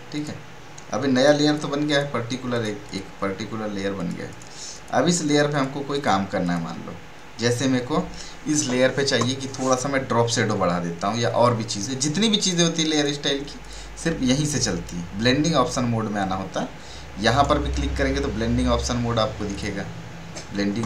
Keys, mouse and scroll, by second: 0.1 click, 12.9 click, 17.3 right click, 19.5 click.